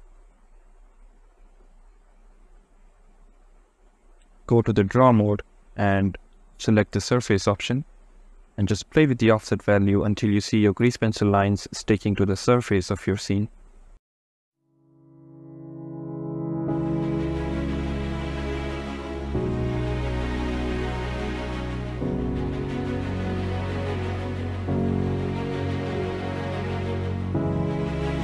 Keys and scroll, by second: 8.8 KP_0, 17.3 ctrl+z, 17.5 ctrl+z, 20.1 ctrl+z, 20.5 ctrl+z, 21.2 ctrl+z, 21.4 ctrl+z, 22.1 ctrl+z, 23.5 ctrl+z, 25.6 ctrl+z.